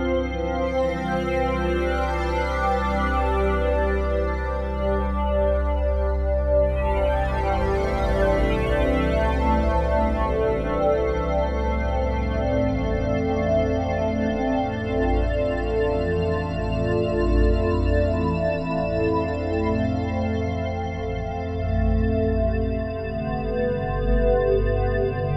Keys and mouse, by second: 0.3 click, 6.5 click, 8.7 click, 9.5 click, 9.7 click, 11.2 click, 11.8 click, 12.4 click, 12.9 alt+click, 13.4 ctrl+alt+click, 14.2 alt+shift+click, 15.2 ctrl+alt+click, 15.8 click, 17.7 click, 18.7 click, 20.0 click, 20.9 click, 24.2-25.0 typing.